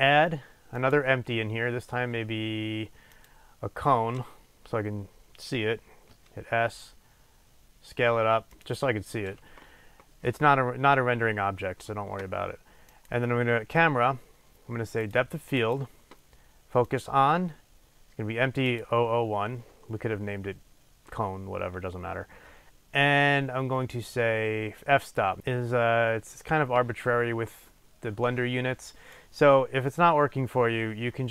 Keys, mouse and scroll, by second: 0.0-8.7 drag, 13.0 click, 15.1 click, 16.9-31.3 drag.